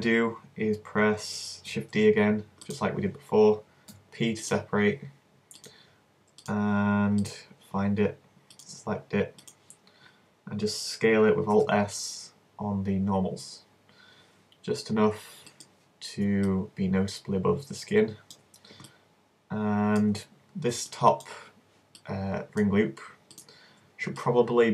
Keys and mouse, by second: 2.0 shift+d, 3.9 p, 6.6 click, 7.3 right click, 7.7 middle click, 8.1 right click, 9.6-11.5 drag, 11.5 alt+s, 15.6 click, 16.6-18.8 middle drag, 24.2-24.7 middle drag.